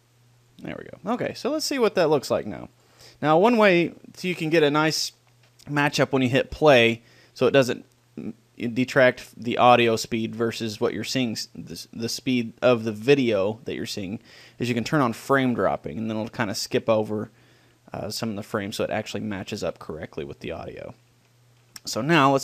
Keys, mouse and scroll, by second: 3.0-5.0 drag, 4.6-8.8 middle drag, 13.6-15.0 drag, 16.2 click, 20.3-22.4 middle drag.